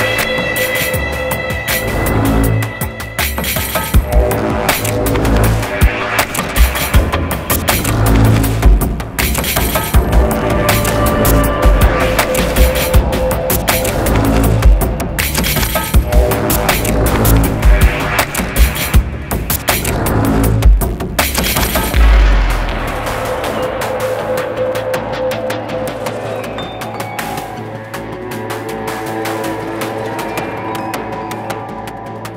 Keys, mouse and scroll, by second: 2.3 space, 2.9 right click, 4.4 double click, 5.0 right click, 11.0 right click, 16.6 space, 16.6 double click, 20.5 ctrl+z, 27.2 right click.